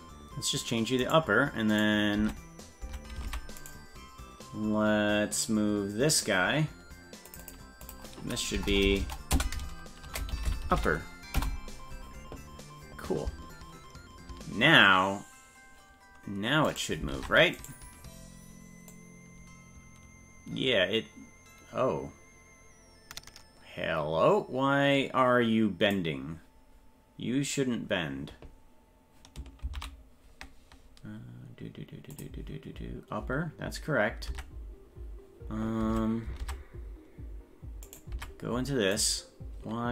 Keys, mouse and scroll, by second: 1.1 right click, 1.8 right click, 2.2 Tab, 3.0 Tab, 3.7 right click, 5.4 click, 6.1 click, 7.3 click, 7.4-11.9 drag, 8.7 BackSpace, 9.0 BackSpace, 10.5 p, 16.7 right click, 17.1 ctrl+Tab, 17.7 right click, 18.9-26.0 drag, 29.7 ctrl+z, 32.1 click, 34.3 Tab, 35.9 Tab, 36.4 Tab, 37.9 right click, 38.1 Tab, 39.0 right click.